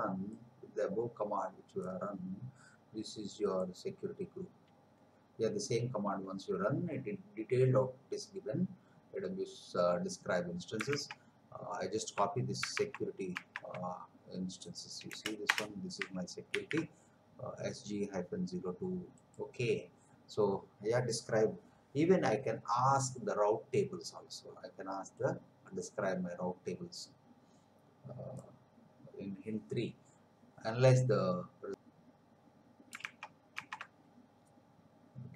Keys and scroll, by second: 11.0 alt+Tab, 12.9 alt+Tab, 15.0 Return, 16.5 ctrl+v, 31.7 alt+Tab, 33.2 alt+Tab.